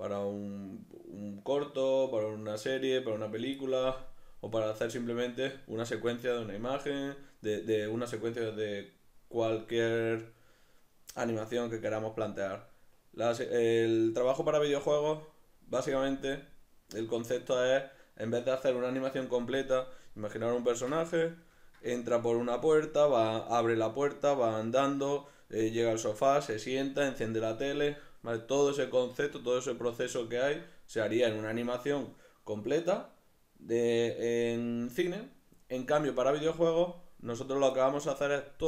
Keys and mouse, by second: 19.9-38.6 middle drag.